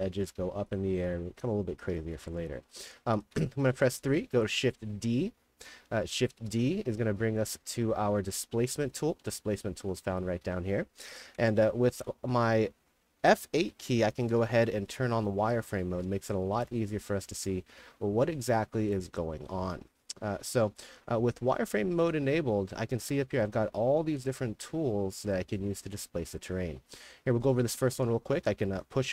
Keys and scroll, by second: 1.2-4.4 typing, 6.3 shift+d, 8.3 d, 8.8 a, 11.9-12.7 typing, 13.7 F8, 14.7-17.0 typing, 19.4 w, 21.9 a, 28.1 w, 28.5 s.